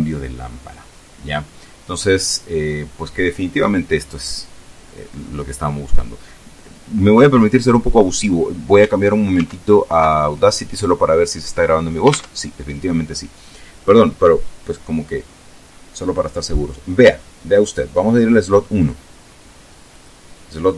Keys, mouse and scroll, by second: 9.2 alt+Tab, 12.0 alt+Tab, 17.3 click, 18.6 click, 19.7 click.